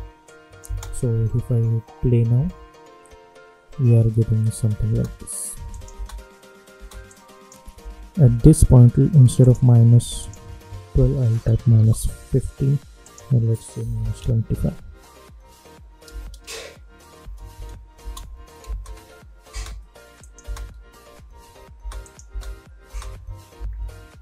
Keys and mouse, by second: 0.2 click, 0.6 space, 4.8 space, 5.7 click, 5.9 space, 7.0 click, 7.7 k, 8.2 k, 9.4 click, 11.0 -, 11.7 Return, 13.0 click, 13.8 -, 17.9 Return, 18.8 space, 20.2 click, 20.4 space, 22.0 click, 22.2 space, 23.5 =, 23.7 =.